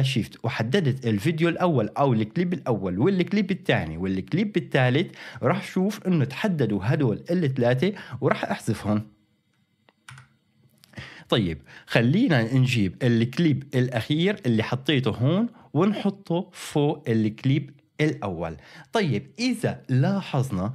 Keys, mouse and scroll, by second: 0.4-4.8 shift+drag, 10.1 Delete, 13.0-18.2 drag.